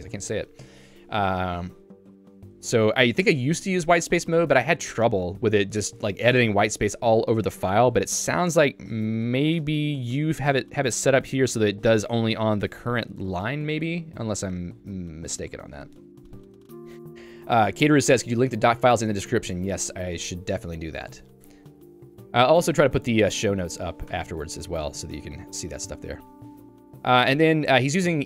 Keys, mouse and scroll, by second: 2.9 click, 3.1 click, 3.8 j, 5.8 q, 7.1 j, 7.4 Escape, 7.7 j, 8.1-11.6 l, 11.8 l, 12.9-14.8 h, 21.4 Escape, 21.9-22.8 typing, 23.4 Home, 24.1 Tab, 24.7 j.